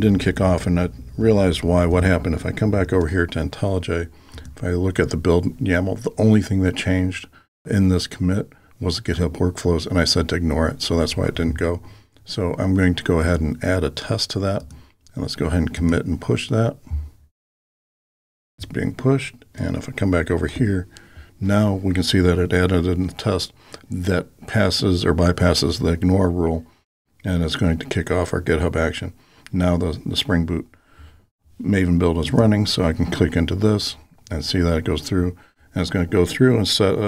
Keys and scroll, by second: 16.1 ctrl+alt+k, 17.6 alt+super+k.